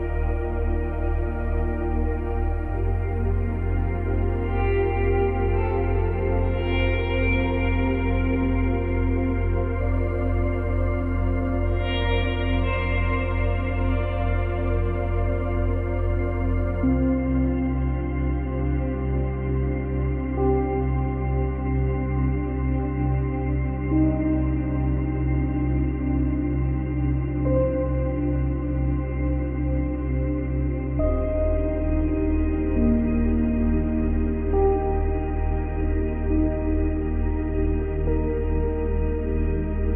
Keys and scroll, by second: 25.4 space, 28.3 space, 33.6 Delete.